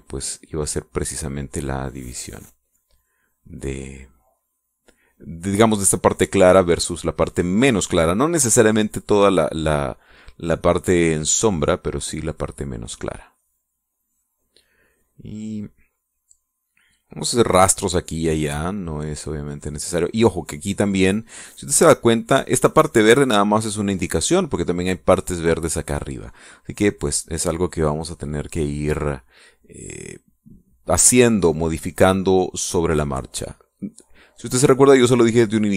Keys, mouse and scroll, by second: 0.3-5.9 drag, 11.0-12.5 drag, 12.6-14.7 drag, 14.8 click, 18.7-20.9 drag, 30.3-35.7 drag.